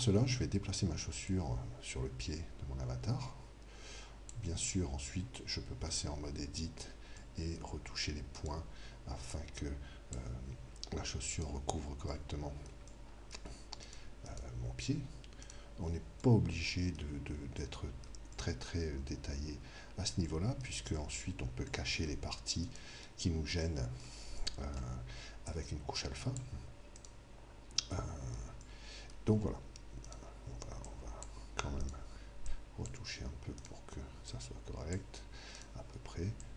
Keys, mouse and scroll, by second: 1.3 click, 5.9 Tab, 7.2-8.3 middle drag, 8.3 right click, 9.3 click, 11.4-12.4 right drag, 12.4 click, 12.4-14.8 middle drag, 13.8-17.2 right drag, 16.3-26.2 middle drag, 17.2 click, 22.6 right click, 24.5-27.3 drag, 25.4-26.7 right drag, 27.0 right click, 28.0-30.5 middle drag, 30.1 click, 30.1-35.2 right drag, 30.9-36.1 drag, 35.6 right click, 36.4 click.